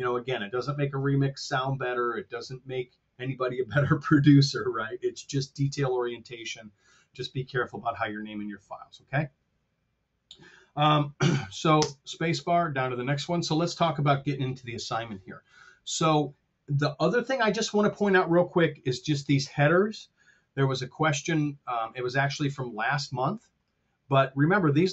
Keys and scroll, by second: 11.7 space, 21.0 F7.